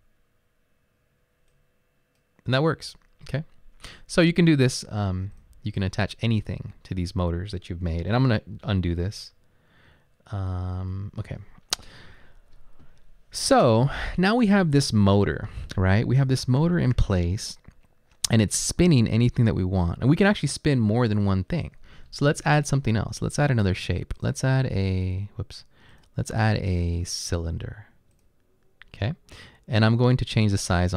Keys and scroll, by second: 9.0 ctrl+z.